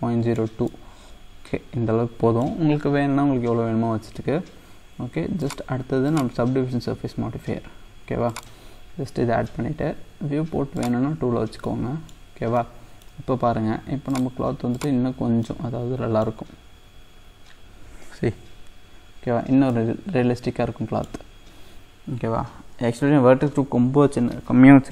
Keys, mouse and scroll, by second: 5.4-11.6 drag, 11.6 middle click, 12.4 scroll down 2, 12.6-14.1 middle drag, 14.1-15.5 drag, 15.5-19.3 middle drag, 19.3-19.7 scroll up 2, 19.8-22.8 middle drag.